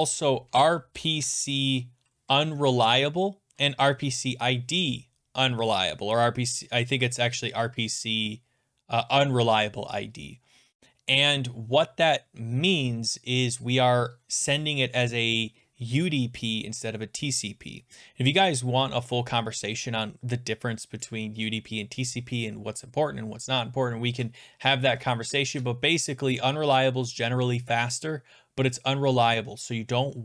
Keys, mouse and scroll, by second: 0.0 click, 0.2 click, 0.3-1.7 typing, 2.4 Down, 2.6 Down, 2.7 Down.